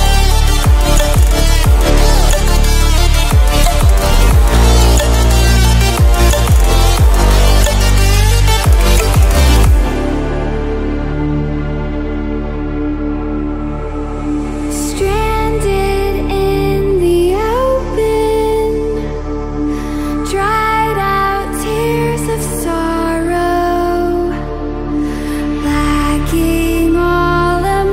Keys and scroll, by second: 10.6 ctrl+e, 23.0 ctrl++, 23.4 ctrl++, 26.5-27.9 ctrl+-.